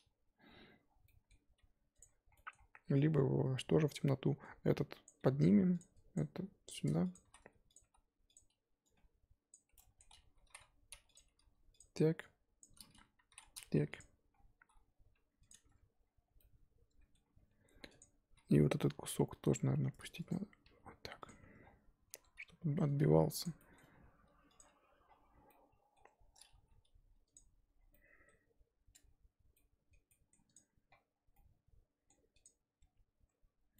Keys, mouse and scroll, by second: 1.6 g, 2.0-2.8 scroll up 1, 2.8 g, 4.0-4.4 scroll up 4, 5.0 click, 5.2 g, 6.1 click, 6.3 g, 7.2 s, 7.8 g, 9.5 click, 10.4 s, 11.2 g, 12.6 click, 13.2 s, 14.6 g, 15.5 Tab, 16.0-16.4 scroll down 2, 16.4 middle click, 17.2-17.9 scroll up 6, 17.3 Tab, 17.9-18.9 drag, 18.9 l, 19.3 l, 20.3 click, 20.7 g, 21.3 Tab, 21.6-22.1 scroll down 1, 22.1 Tab, 22.4 a, 23.4 click, 23.9 g, 24.6 Tab, 25.0-25.4 scroll down 5, 25.5 middle click, 26.0 Tab, 26.5 g, 28.9 Tab, 29.6 middle click, 30.5 click, 30.6-31.3 scroll up 8, 31.3-32.4 middle drag, 32.4 click, 32.8 Tab.